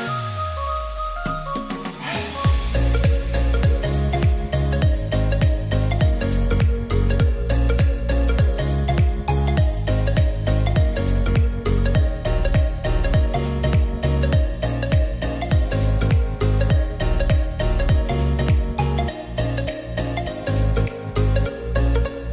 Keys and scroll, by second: 2.6 r, 4.0 e, 6.8 r, 11.5 ctrl+r.